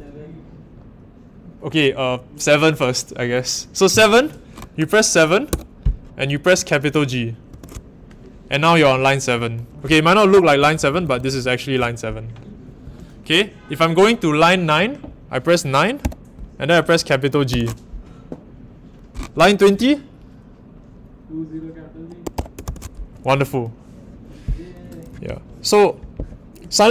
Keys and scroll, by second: 5.5 7, 7.5 shift+g, 9.6-11.8 typing, 16.0 g, 17.5 shift+g, 22.0-23.1 typing.